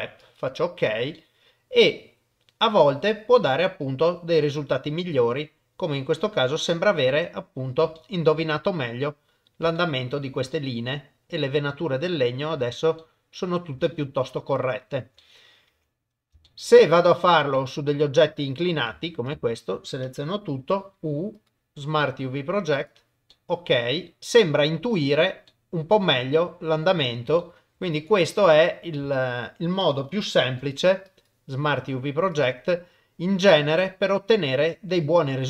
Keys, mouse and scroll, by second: 1.2-3.8 middle drag, 3.8 click, 3.8 right click, 4.6 middle click, 6.0 middle click, 7.1 middle click, 8.0 shift+middle click, 8.4-9.5 middle drag, 9.8 shift+middle click, 10.5 middle click, 11.7 shift+click, 12.0 shift+middle click, 13.0 middle click, 13.8-15.0 shift+middle drag, 15.2 middle click, 15.7 Tab, 16.4 shift+middle click, 17.1 click, 17.5 middle click, 19.3 Tab, 19.3 a, 20.6 u, 23.3 middle click, 24.2 middle click, 25.0 Tab, 25.5-27.1 middle drag, 27.4 shift+middle click, 28.1 click, 28.4 Tab, 29.0 a, 30.5 u, 33.5 Tab, 33.9-35.2 middle drag.